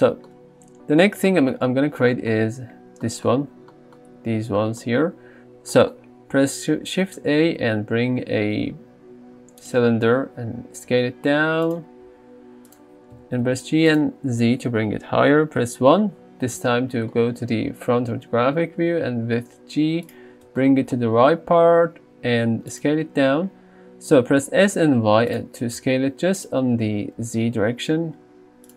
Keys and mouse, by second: 0.0 shift+middle drag, 7.3 shift+a, 10.9 s, 12.1 s, 13.2 g, 13.5 z, 15.6 KP_1, 18.9 g, 21.7 s, 22.7 click, 24.5 s, 24.7 z, 25.7 s, 25.8 z, 26.4-26.9 drag, 26.9 g, 27.2 z.